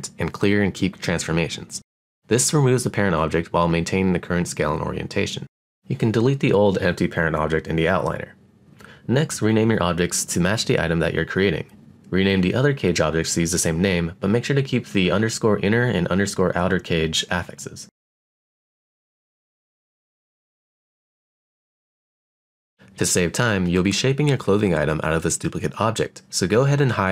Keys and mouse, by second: 3.1 click, 4.2 click, 5.8 click, 6.8-10.3 drag, 11.9-16.0 drag, 17.5 click, 17.9-22.2 drag, 21.7 e, 27.0 click.